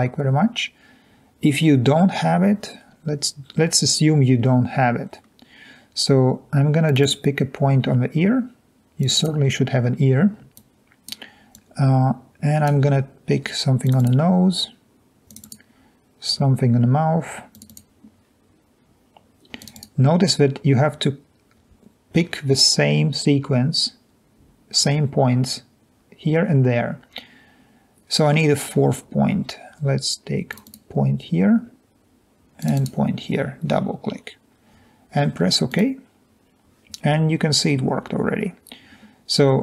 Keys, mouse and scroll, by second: 5.0-5.9 scroll down 2, 9.0 click, 9.2 click, 10.6 click, 11.7 click, 15.3 click, 15.4-15.9 drag, 17.5 click, 17.7 click, 35.7 click.